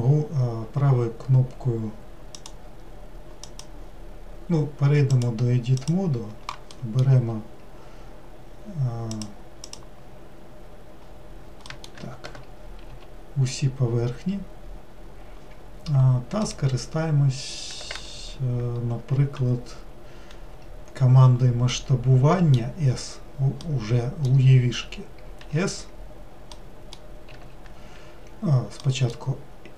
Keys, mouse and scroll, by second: 5.9-7.0 drag, 7.0-12.0 middle drag, 12.0 Tab, 12.9 a.